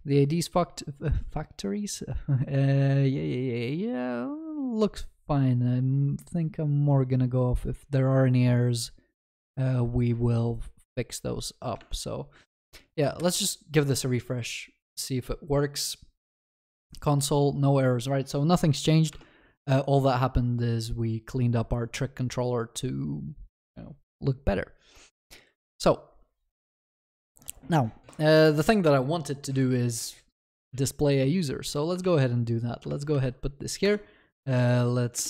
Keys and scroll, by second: 32.0 ctrl+c.